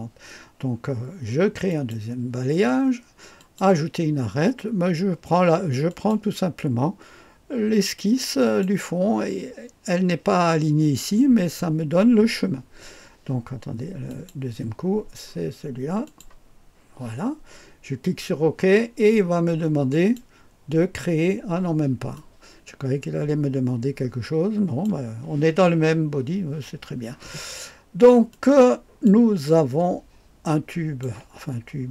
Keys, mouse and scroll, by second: 1.7 click, 3.4 click, 5.9 click, 8.4 click, 14.0 click, 16.0 click, 19.9 click, 22.1-24.8 drag, 28.3 click, 29.4-31.0 drag.